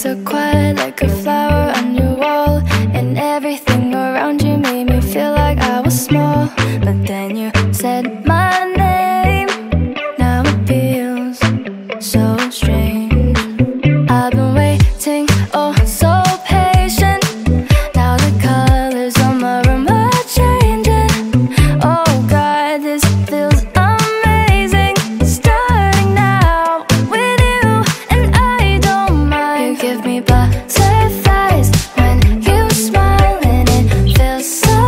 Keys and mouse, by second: 28.4 click, 29.4 click, 30.0 click.